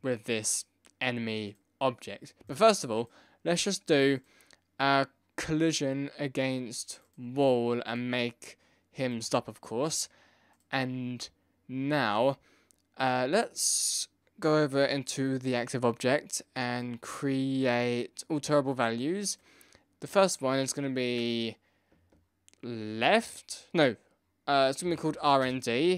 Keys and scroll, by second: 24.6-25.5 typing.